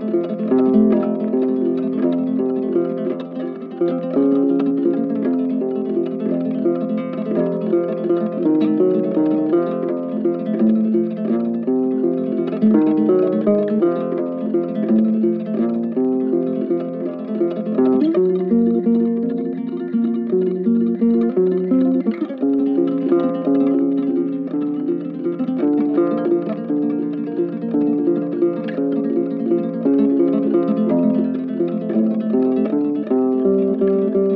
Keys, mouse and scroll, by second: 2.8 ctrl+z, 3.0 ctrl+z, 10.9 right click, 16.3 right click, 19.4 shift+click, 20.2 shift+click, 21.8 shift+click, 22.2 shift+click, 24.6 shift+click, 25.0 shift+click, 28.0 shift+click.